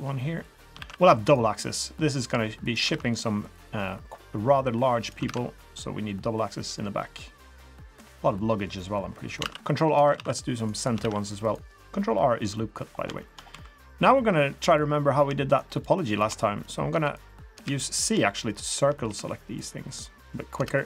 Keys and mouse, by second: 0.8 ctrl+r, 2.9 ctrl+r, 5.3 ctrl+r, 9.4 ctrl+r, 10.1 ctrl+r, 11.1 ctrl+r, 12.5 click, 13.2 shift+click, 13.5 3, 14.6 click, 15.5 shift+click, 15.8-16.3 shift+drag, 16.4 middle click, 16.9 c, 18.3 shift+click, 19.0 c.